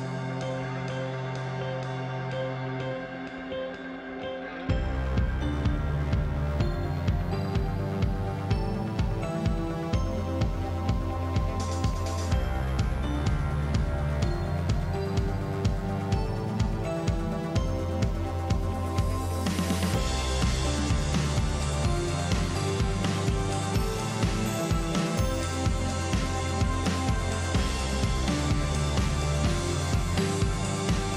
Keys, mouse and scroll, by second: 0.3 click, 8.3 click, 10.3 click, 13.9 click, 14.7 click, 17.2-18.2 drag, 19.6 click, 20.7 click, 21.6-24.6 drag, 25.7 click, 27.6 click, 29.4 click, 30.6 click.